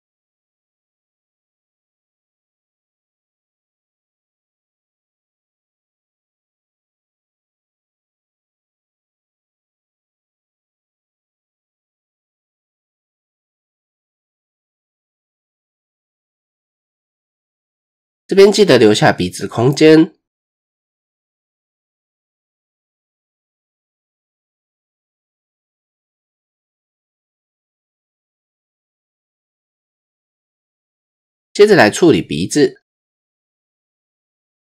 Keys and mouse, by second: 1.3-3.4 drag, 4.9 click, 7.7 shift+click, 9.8 shift+click, 10.7-12.6 drag, 14.3 click, 16.3-19.0 drag, 20.1-20.7 shift+middle drag, 21.7-22.6 shift+middle drag, 24.6 click, 25.2 Tab, 27.3 shift+middle click, 28.6 Tab, 29.5 shift+click, 31.2 shift+click, 33.0 middle click, 33.6 typing, 33.8 shift+click, 34.5 shift+click.